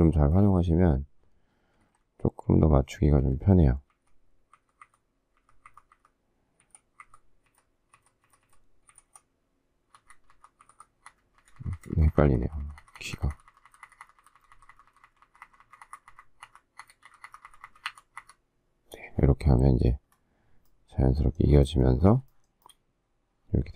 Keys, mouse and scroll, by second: 2.4 shift+Left, 3.2 shift+Up, 3.9 shift+Left, 4.5 shift+Right, 6.8 shift+Left, 7.2 shift+Right, 7.5 shift+Down, 9.1 shift+Left, 10.0 shift+Up, 10.6 shift+Right, 11.2 shift+Up, 22.3 shift+middle click, 22.6 shift+middle click.